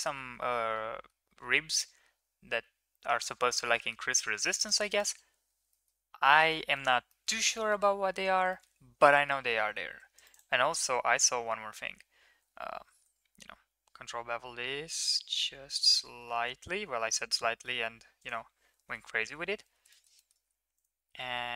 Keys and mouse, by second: 4.6 middle click, 4.9 middle click, 5.7 middle drag, 6.7 shift+middle drag, 7.1 middle click, 7.6 shift+middle click, 7.9 Tab, 8.5 middle click, 9.1 middle click, 9.8 ctrl+r, 12.8 ctrl+b, 19.2 3, 19.9 shift+middle drag, 20.2 middle click, 20.7 right drag.